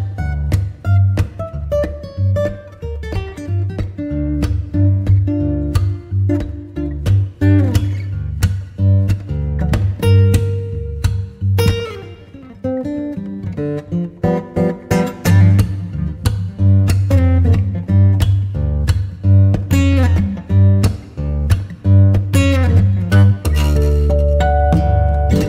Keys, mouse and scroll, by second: 0.2 click, 0.9 click, 1.9 click, 3.3-4.9 middle drag, 5.3-6.0 shift+drag, 9.2 click, 10.4 ctrl+s, 12.4 Tab, 12.9 click, 12.9 middle click, 13.1 click, 15.0 Tab, 15.4 drag, 15.5 middle click, 15.6 click, 15.7 middle click, 15.9 drag, 16.1 middle drag.